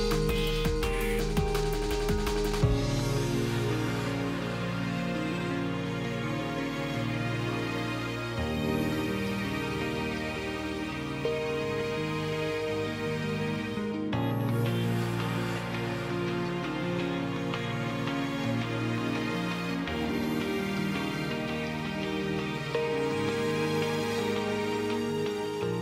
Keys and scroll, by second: 5.3 Return, 9.4 Return, 12.9 Return, 13.5 Return, 18.0 shift+F5, 19.6 Return, 23.0 Return, 23.5 Return.